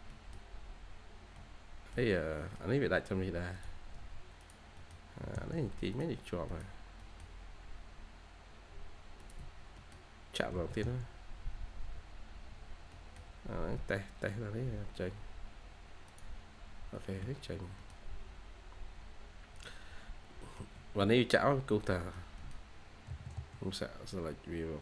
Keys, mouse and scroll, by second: 0.0 middle click, 0.7-1.2 scroll up 1, 1.3 middle click, 1.9-2.2 scroll down 1, 2.3 middle click, 2.9-3.8 scroll up 1, 3.8 Escape, 4.7 middle click, 5.1 typing, 6.9 middle click, 7.3-7.6 scroll down 1, 9.3 Escape, 9.7 middle click, 10.4 typing, 12.1-12.7 scroll down 2, 12.4 typing, 12.8 middle click, 13.5-15.2 scroll up 1, 16.9 Escape, 17.1 Escape, 17.3-17.7 scroll down 1, 17.7 middle click, 18.3-19.7 scroll up 1, 20.0 scroll down 1, 20.3 middle click, 20.6 Escape, 20.9 Escape, 21.9 middle click.